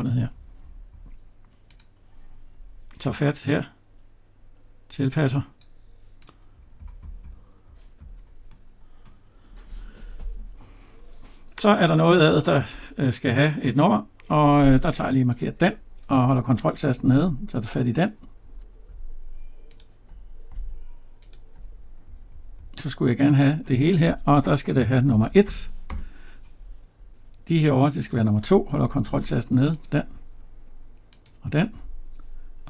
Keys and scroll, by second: 25.7 Return.